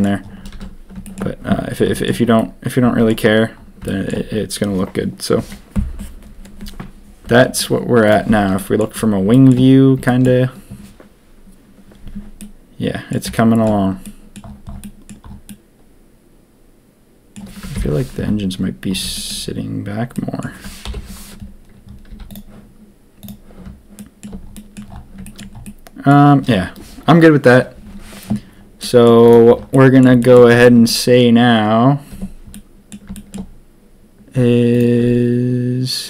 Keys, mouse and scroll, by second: 0.5 ctrl+s, 1.0 shift+middle click, 1.9 shift+middle drag, 2.3-3.0 middle drag, 3.8 shift+middle drag, 8.0 click, 8.5 middle click, 9.3 shift+middle drag, 10.0 shift+middle drag, 12.4-13.1 middle drag, 13.3 shift+middle drag, 14.0-14.3 middle drag, 14.8 middle drag, 15.4-17.3 middle drag, 17.7 ctrl+KP_3, 19.1 shift+middle drag, 20.1 middle drag, 20.8 ctrl+KP_1, 22.0 z, 23.2 click, 23.9 shift+drag, 24.5 drag, 25.2 shift+middle drag, 25.6-26.1 middle drag, 28.8 middle drag, 29.7 middle drag, 30.2 shift+middle click, 30.6 middle drag, 32.1 Tab, 32.5 middle click, 33.1 shift+middle click, 34.7 alt+click.